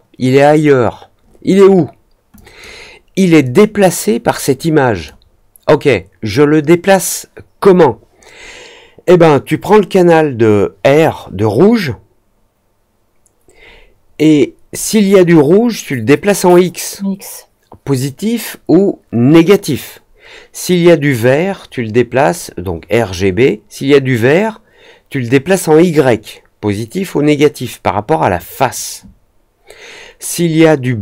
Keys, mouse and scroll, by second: 2.3 click, 3.4-5.0 drag.